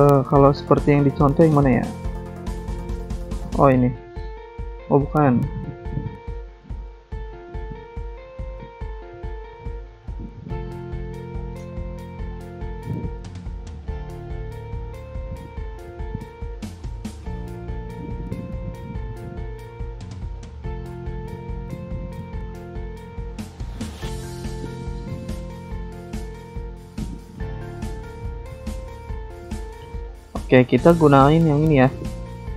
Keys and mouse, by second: 0.0-0.8 typing, 7.6 click, 11.6 click, 12.8 click, 15.3 click, 19.8 click, 21.9 click, 24.5 click, 24.7 click, 26.1 click, 28.2 Escape, 28.7 click, 30.0 click, 30.1 click, 30.2 click, 30.3 double click, 30.9 click, 30.9 click.